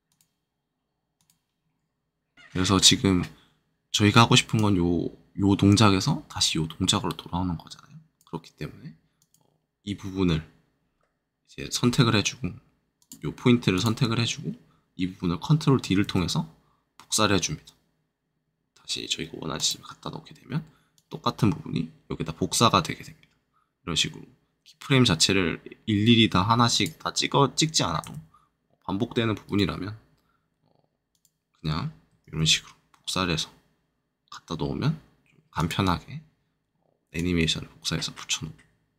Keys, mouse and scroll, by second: 0.0-2.3 drag, 2.3 right click, 4.5-10.8 drag, 10.7-11.8 middle drag, 11.8-12.9 scroll up 2, 12.9-17.6 drag, 19.5-29.4 shift+drag, 29.4-32.0 shift+right drag, 35.0 shift+click, 35.5-36.6 shift+drag, 36.9-38.9 drag.